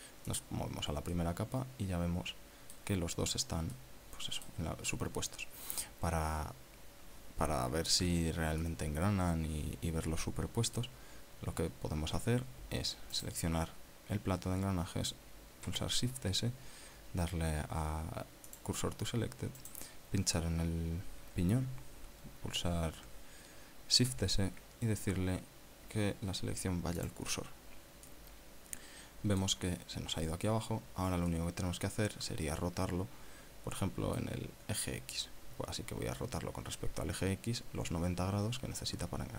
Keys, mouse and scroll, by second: 1.3 click, 2.2-4.0 middle drag, 4.7-5.2 scroll up 1, 5.2-5.7 middle drag, 9.7-12.1 middle drag, 14.2 right click, 16.7 shift+s, 19.5 click, 20.7 right click, 25.1 shift+s, 28.1 click, 28.7 scroll down 2, 29.1-30.7 middle drag, 31.5 scroll up 2, 32.4-35.4 drag.